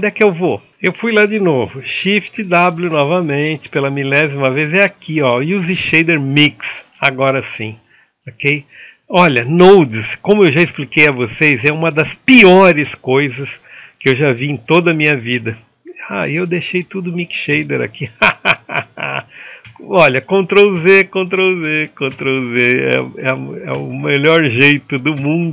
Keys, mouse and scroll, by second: 7.6 click, 8.9-19.4 drag, 19.4 ctrl+z, 21.0 ctrl+z, 22.6 ctrl+z, 24.1 ctrl+z.